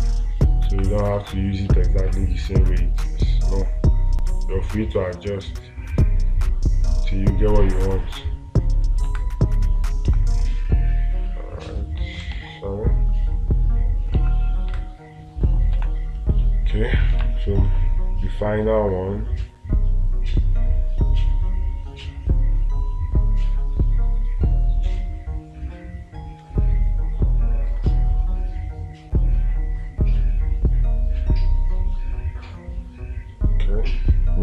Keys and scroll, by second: 0.4 space, 12.8 ctrl+z, 15.2 space, 17.7 space.